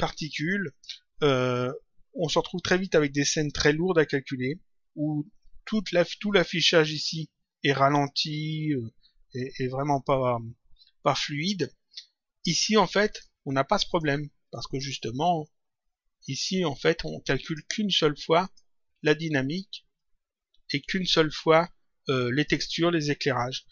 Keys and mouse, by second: 7.0 click, 13.0 click, 17.4 click, 19.9 click, 22.3 click.